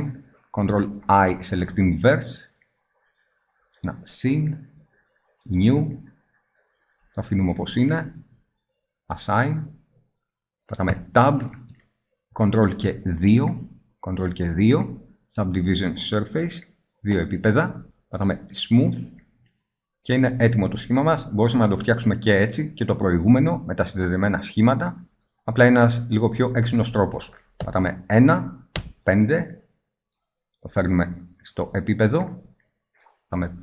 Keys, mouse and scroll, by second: 1.3 ctrl+i, 5.8-6.7 drag, 6.7-9.3 middle drag, 9.3-10.7 drag, 10.7 middle click, 11.1 Tab, 13.4 ctrl+2, 18.7-20.1 drag, 20.1 middle drag, 24.9-26.9 middle drag, 27.5 KP_1, 28.6 KP_5, 32.2 middle click, 33.3 KP_5.